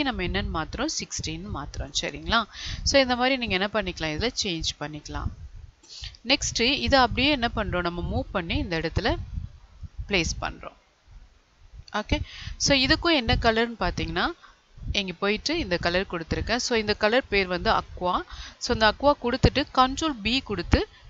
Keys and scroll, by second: 20.1 ctrl+b.